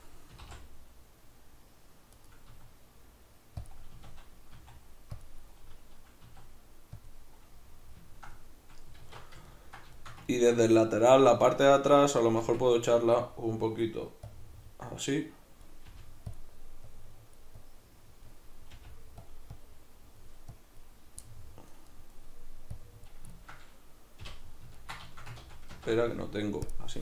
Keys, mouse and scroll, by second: 0.3 s, 2.3 right click, 2.5 s, 3.7 click, 3.9 a, 5.3 click, 6.3 s, 7.1 click, 7.4-14.3 middle drag, 9.0 alt+q, 12.4 Tab, 14.3-16.4 drag, 15.9 f, 18.7 click, 18.7 f, 21.2 click, 21.2-22.7 middle drag, 22.7 click, 23.3-26.6 ctrl+middle drag, 24.2 k, 25.4 ctrl+z, 26.6-27.0 drag.